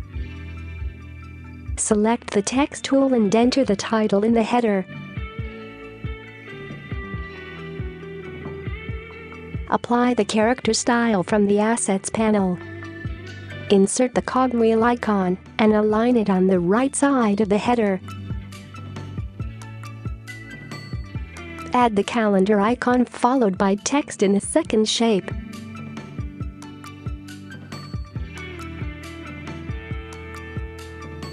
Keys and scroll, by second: 4.6-5.0 typing, 6.2-6.8 typing, 19.3-20.1 space, 28.8-29.6 typing.